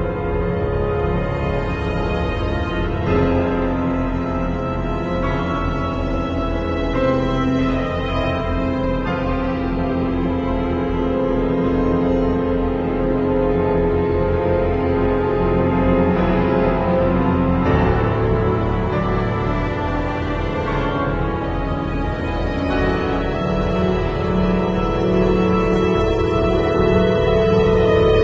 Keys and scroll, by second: 6.8 v, 9.7 shift+super+g, 13.3 super+l, 22.0 z, 23.8 v, 24.0 space.